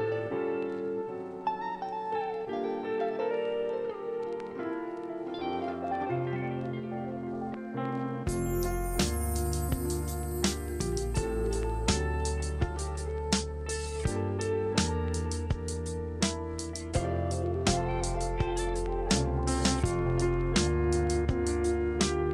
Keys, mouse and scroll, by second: 1.3 click, 2.3 click, 4.0 click, 5.5 click, 7.2-8.8 scroll, 9.2 click, 14.4 click, 15.7-17.4 scroll, 17.4 click, 19.3 click, 22.1 click.